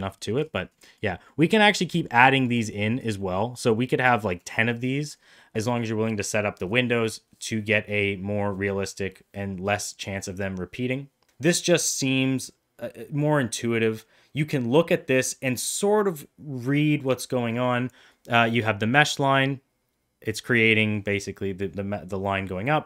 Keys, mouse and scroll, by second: 0.2 middle click, 0.8 middle drag, 1.2 middle click, 1.6 middle drag, 2.0 middle click, 2.5 click, 2.8 middle drag, 3.2 middle click, 4.1 middle click.